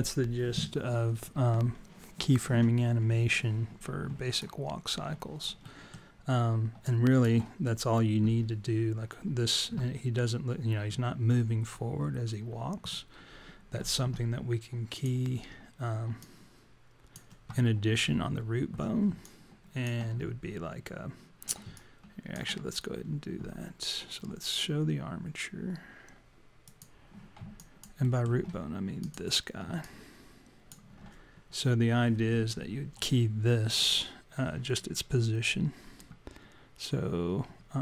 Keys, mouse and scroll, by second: 4.4 alt+click, 5.6 alt+middle click, 6.9 alt+click, 10.1-10.7 scroll down 1, 10.7 scroll down 2, 14.9 click, 16.3 click, 19.3 alt+click, 21.7 alt+click, 22.7-23.0 scroll up 3, 26.7 click, 27.6 alt+click, 28.1 alt+middle click, 29.0 click, 29.8 alt+click.